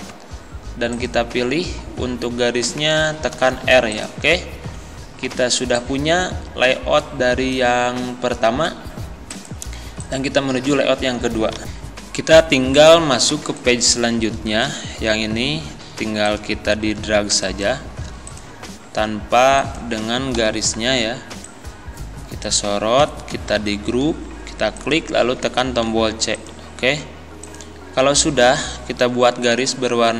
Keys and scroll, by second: 3.4 r, 5.3 z, 11.6 ctrl+End, 20.4 Delete, 23.5 ctrl+g, 25.9 c.